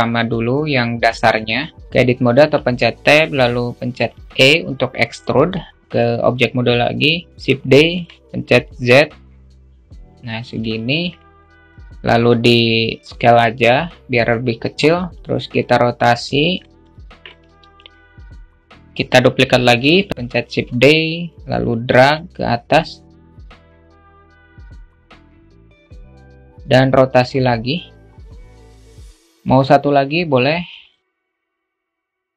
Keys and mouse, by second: 1.7 Tab, 5.8 Tab, 7.4 shift+d, 10.3 alt+middle click, 11.2-13.0 alt+middle drag, 13.0 s, 14.8 alt+middle click, 15.2-16.2 drag, 16.6-18.8 middle drag, 19.1 shift+d, 20.8 click, 21.8-22.8 alt+shift+middle drag, 23.5 click, 24.2-25.8 drag, 25.9-27.4 alt+middle drag, 28.8 click, 29.9 shift+d.